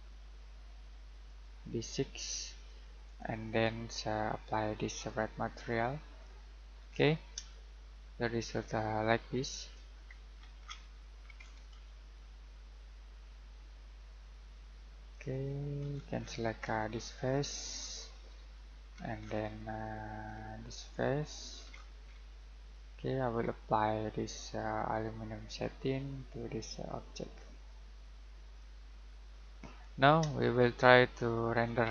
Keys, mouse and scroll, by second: 6.7 scroll down 1, 6.8-7.3 scroll up 1, 7.5 shift+middle click, 9.9-10.8 scroll down 1, 11.3-13.8 scroll up 1, 15.1 click, 15.8 scroll down 1, 15.9 scroll up 1, 16.2-16.5 scroll down 1, 16.5-16.9 scroll up 1, 16.9 scroll down 1, 17.1-18.0 scroll up 1, 18.0 middle click, 18.8 scroll up 1, 18.9-20.3 scroll down 1, 20.6 click, 21.5 scroll down 1, 21.7 scroll up 1, 22.5 middle click, 25.5 click, 29.6 scroll down 1, 29.8-30.2 scroll up 1, 30.3 middle click.